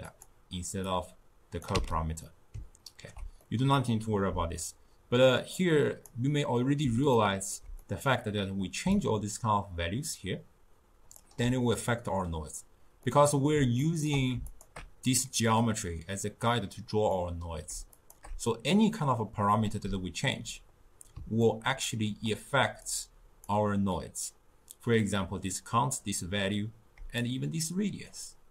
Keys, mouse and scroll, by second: 0.1 click, 0.9-1.8 drag, 1.8 x, 2.3-5.6 middle drag, 5.6 click, 7.2-9.0 ctrl+middle drag, 9.0-12.0 shift+drag, 13.1-14.5 middle drag, 14.5 alt+shift+click, 17.3-18.0 middle drag, 18.0 alt+shift+click, 18.5-22.9 middle drag, 22.9 click, 27.3-28.5 shift+drag.